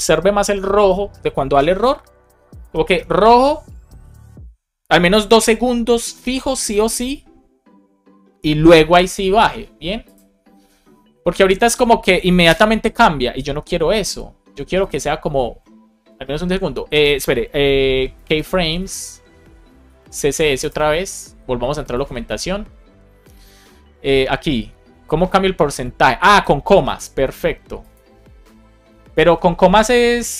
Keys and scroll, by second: 12.4 Return, 19.8 Down, 20.0 space, 20.6 Return, 28.8 space, 29.6 shift+5.